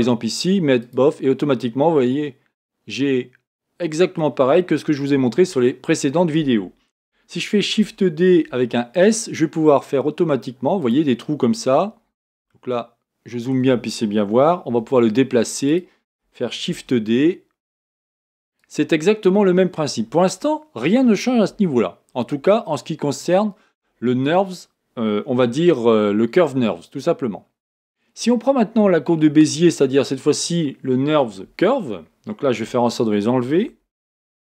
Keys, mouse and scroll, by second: 4.6 middle click, 5.1 KP_1, 7.8 shift+d, 11.1-12.5 scroll up 4, 12.5-14.7 shift+middle drag, 14.7 g, 16.7 shift+d, 27.9-31.0 scroll down 1, 31.0-31.3 scroll down 1, 32.6 Tab.